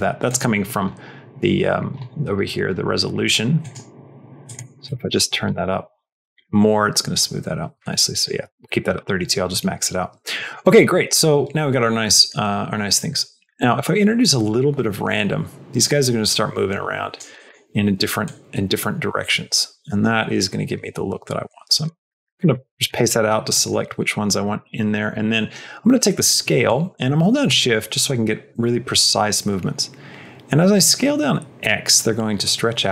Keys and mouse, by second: 0.1 click, 3.5 click, 4.3 click, 4.9 click, 5.4 click, 8.1 click, 10.3 middle click, 10.9 middle click, 12.1 middle click, 12.9 middle click, 13.4 middle click, 14.1-17.1 drag, 17.3 middle click, 18.1-21.7 drag, 21.9 middle click, 22.6 middle click, 23.4 middle click, 24.4 middle click, 24.8 middle click, 25.1 middle click, 26.7-32.3 shift+drag, 32.8-32.9 shift+drag.